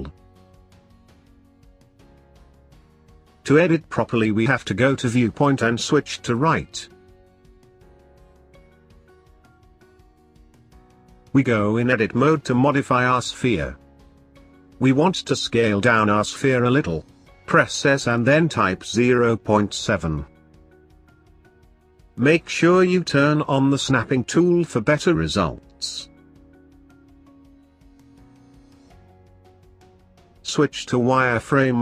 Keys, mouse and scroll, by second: 0.4-3.4 shift+middle drag, 4.5-7.7 drag, 9.7-10.1 scroll up 3, 10.2-11.5 shift+middle drag, 11.5 shift+scroll up 1, 12.6 shift+middle click, 13.3-14.7 scroll up 1, 14.7 Tab, 16.0 s, 21.1 click, 21.3 click, 23.3-25.9 drag.